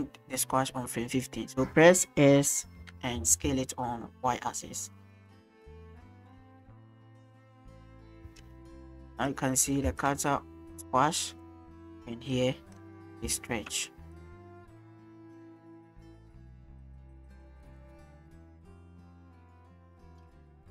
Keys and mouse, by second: 2.8 s, 3.3 y, 7.6-8.2 drag, 8.2 space, 9.2 click, 9.9 space, 10.0-12.8 drag, 13.3 shift+drag, 14.2-20.7 drag.